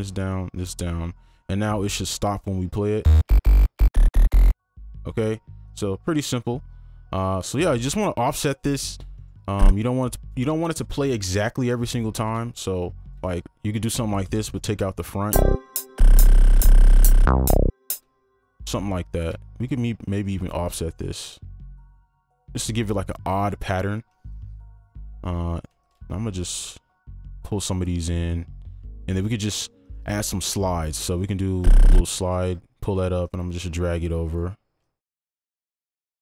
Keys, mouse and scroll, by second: 3.0-4.8 typing, 9.2 right click, 10.6 ctrl+click, 11.8 shift+click, 13.2 shift+right click, 17.9 space, 19.6 shift+click, 21.3 shift+click, 23.3 right click, 24.3 ctrl+click, 25.5 right click, 25.8 ctrl+click, 32.2 ctrl+click, 34.8 alt+click.